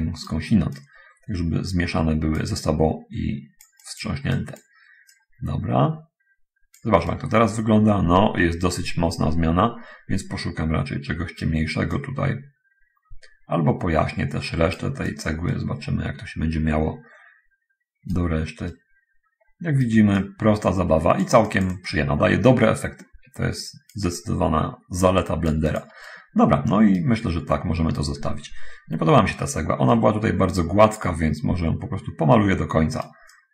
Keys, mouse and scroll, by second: 1.0-2.8 drag, 5.4-7.2 drag, 7.4-11.8 right drag, 15.8-18.6 right drag, 19.0-20.3 right drag, 20.5-21.7 drag, 24.2-25.7 drag, 25.9 click, 26.4-27.1 right drag, 27.6 middle click, 28.3 middle click, 28.4-29.0 scroll up 1, 29.1-29.5 scroll up 1, 30.1-33.4 right drag.